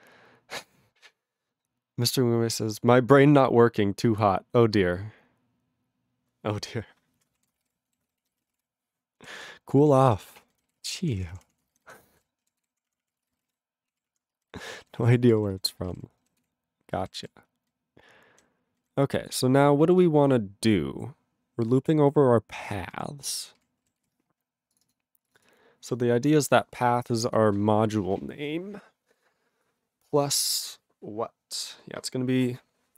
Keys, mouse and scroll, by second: 7.4 ctrl+a, 7.5 ctrl+space, 7.6 ctrl+e, 7.7 ctrl+g, 8.0 ctrl+s, 8.2 ctrl+a, 8.3 ctrl+n, 8.4 ctrl+space, 8.5 ctrl+g, 9.0 ctrl+g, 9.4 ctrl+s, 9.6 ctrl+a, 9.8 ctrl+p, 10.0 ctrl+space, 10.1 ctrl+n, 10.2 ctrl+n, 10.5 ctrl+n, 10.6 ctrl+g, 10.9 ctrl+s, 11.1 ctrl+p, 11.1 ctrl+e, 11.2 ctrl+p, 11.3 ctrl+p, 11.5 ctrl+a, 11.6 ctrl+space, 11.7 ctrl+n, 11.8 ctrl+n, 12.1 ctrl+n, 12.1 ctrl+g, 12.1 ctrl+e, 12.6 ctrl+s, 12.7 ctrl+p, 12.9 ctrl+p, 13.1 ctrl+space, 13.2 ctrl+e, 13.3 ctrl+n, 13.3 ctrl+n, 13.4 ctrl+e, 13.5 ctrl+g, 13.9 ctrl+a, 13.9 ctrl+p, 14.1 ctrl+p, 14.2 ctrl+space, 14.4 ctrl+n, 14.5 ctrl+n, 14.6 ctrl+g, 15.0 ctrl+s, 15.1 ctrl+p, 15.2 ctrl+p, 15.4 ctrl+n, 15.5 ctrl+n, 15.8 ctrl+n, 15.8 ctrl+g, 15.9 ctrl+e, 16.4 ctrl+s, 17.1 ctrl+alt+b, 17.2 ctrl+alt+b, 17.7-18.4 ctrl+n, 18.8 ctrl+n, 19.8 ctrl+a, 20.6-21.4 scroll down 4, 21.4-22.6 scroll down 1, 22.6 ctrl+space, 22.7 ctrl+n, 22.8 ctrl+n, 23.4 ctrl+n, 23.6 ctrl+g, 24.0 ctrl+s, 24.7 click, 24.8 click, 24.8 click, 24.9 double click, 25.3 click, 25.3 click, 25.4 click, 25.5 double click, 26.3 click, 26.4 click, 27.3 click, 27.4 double click.